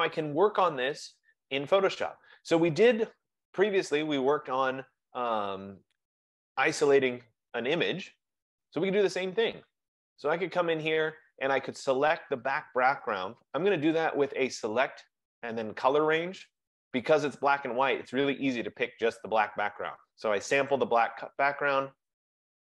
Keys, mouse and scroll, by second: 7.6 F15, 14.2 click, 16.7 click.